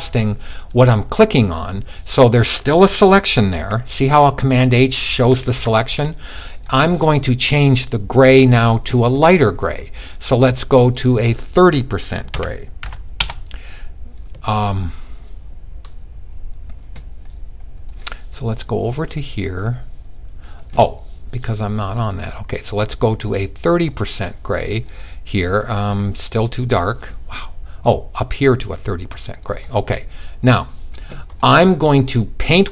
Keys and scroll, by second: 3.0 super+h, 4.0 super+h, 4.5-5.2 typing, 11.8-12.3 typing.